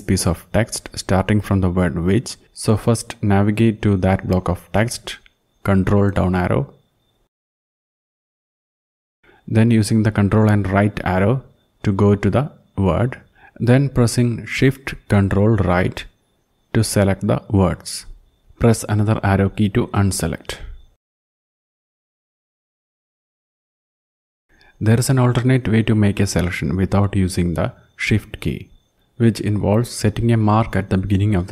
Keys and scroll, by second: 5.9 ctrl+Down, 6.5 ctrl+Down, 6.7 ctrl+Down, 6.9 ctrl+Down, 7.1 ctrl+Down, 7.7 ctrl+Up, 9.1 ctrl+Right, 9.5 ctrl+Right, 9.7 ctrl+Right, 10.1 ctrl+Right, 10.3 ctrl+Right, 10.4 ctrl+Right, 11.0 ctrl+Left, 14.4 ctrl+shift+Right, 14.8 ctrl+shift+Right, 15.4 ctrl+shift+Right, 15.9 ctrl+shift+Right, 16.5 ctrl+shift+Right, 17.4 ctrl+shift+Right, 17.9 ctrl+shift+Right, 20.8 Left, 23.1 ctrl+Home.